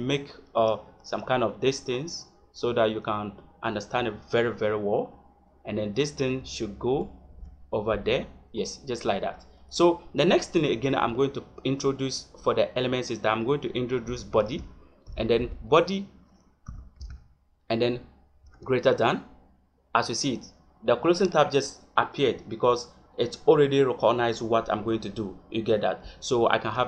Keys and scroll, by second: 0.8 Tab, 3.9 Tab, 6.8 Tab, 11.0 Return, 12.1 BackSpace, 14.3 shift+,, 15.0 b, 15.3 o, 16.6 d, 18.3 shift+., 26.6 Return.